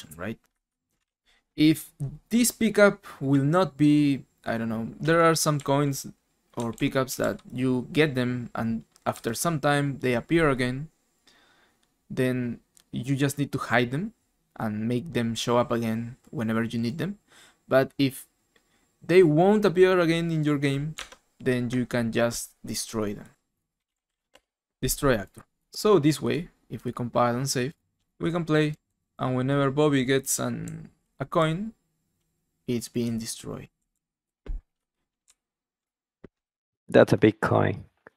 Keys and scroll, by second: 5.5-7.7 typing, 8.9-9.7 typing, 20.9 alt+Tab, 23.5-25.0 typing, 28.0-29.1 typing, 30.6 w, 31.9-35.3 typing.